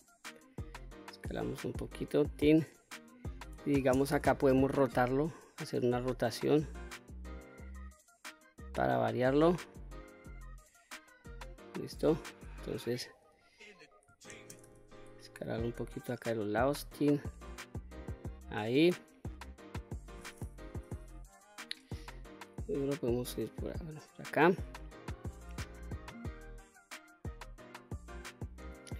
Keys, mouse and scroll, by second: 0.4-2.0 drag, 3.3 shift+space, 4.5-8.9 drag, 10.7 middle click, 11.2 middle click, 13.9 shift+space, 15.2-16.5 drag, 16.9-19.5 middle drag, 20.2 KP_1, 20.7-21.1 scroll up 2, 21.9-23.9 drag, 25.7-28.3 drag.